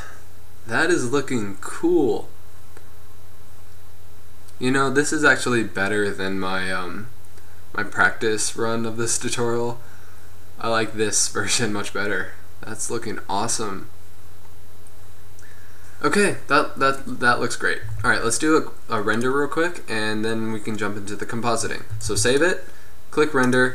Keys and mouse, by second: 18.1 z, 19.3 z, 20.3-21.4 drag, 22.2 ctrl+s.